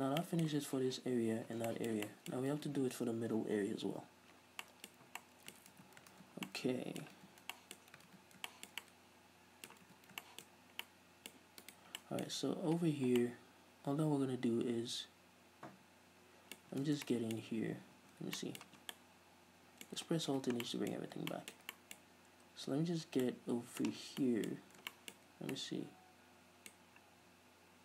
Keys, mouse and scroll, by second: 0.3 scroll down 1, 0.4 middle click, 1.7 scroll down 1, 1.9-2.4 shift+middle drag, 4.9 ctrl+s, 5.0 middle click, 5.6-9.9 middle drag, 6.0 ctrl+s, 7.5 ctrl+s, 8.0 scroll up 2, 8.3 ctrl+s, 10.1 ctrl+s, 10.7 middle click, 10.7 scroll up 1, 11.2 middle click, 11.8 right click, 12.2-16.7 middle drag, 16.9 Tab, 17.3 shift+middle click, 18.2 Tab, 18.6 middle click, 18.8 Tab, 19.0 scroll down 2, 19.1 middle click, 19.9 middle click, 20.5 alt+h, 20.8 middle click, 21.1-21.5 scroll up 2, 21.5 shift+middle click, 21.7 middle click, 22.3 scroll up 1, 23.3 scroll down 1, 23.6 middle click, 24.2 shift+middle click, 24.2 scroll down 2, 24.8 scroll up 2, 25.2-27.1 middle drag.